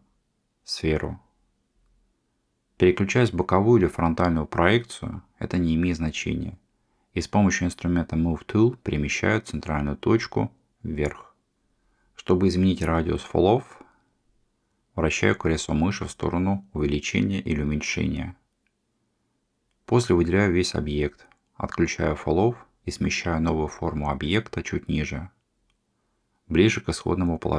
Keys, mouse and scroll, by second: 2.8-4.5 middle drag, 7.0 click, 9.0-17.6 drag, 21.6 a, 22.6 click, 23.8-26.6 drag, 27.4-27.5 middle drag.